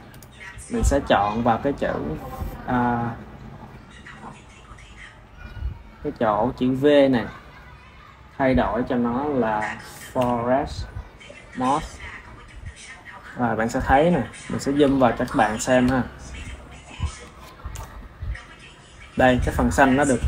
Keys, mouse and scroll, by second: 3.2 click, 5.2 click, 6.5 drag, 7.9 click, 8.6 click, 10.2 click, 11.8 click, 13.6-17.6 ctrl+middle drag, 17.6 KP_0.